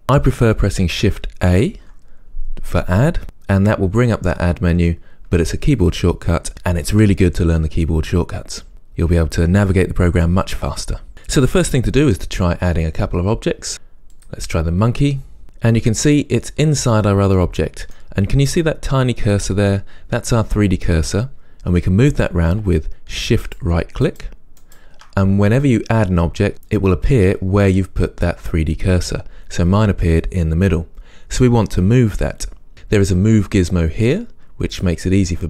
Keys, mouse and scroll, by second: 1.7 shift+a, 15.4 scroll up 1, 16.2-23.5 middle drag, 23.5 shift+right click, 24.1 shift+right click, 24.7 shift+right click, 34.8-35.4 drag.